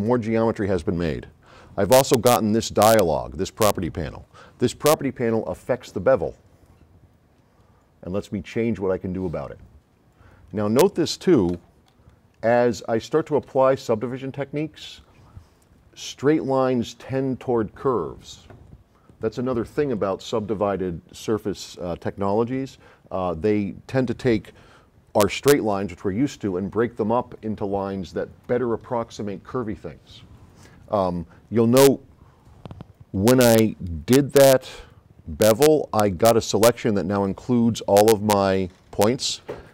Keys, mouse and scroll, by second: 2.9-3.5 drag, 6.7-8.0 drag, 10.4 click, 11.7 s, 11.9 right click, 15.0 right click.